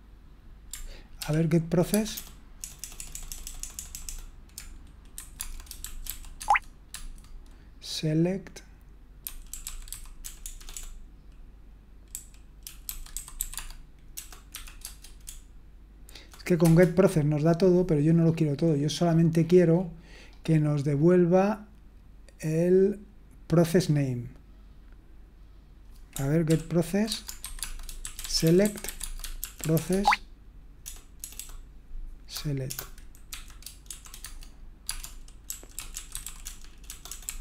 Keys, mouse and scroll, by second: 0.7-1.2 scroll up 1, 1.2 ctrl+p, 1.9-4.0 typing, 5.1-6.3 typing, 6.4 Tab, 6.9 Tab, 9.0-10.5 typing, 11.8-16.2 typing, 16.6 Return, 26.5 ctrl+p, 27.0-31.3 typing, 32.6-37.4 typing.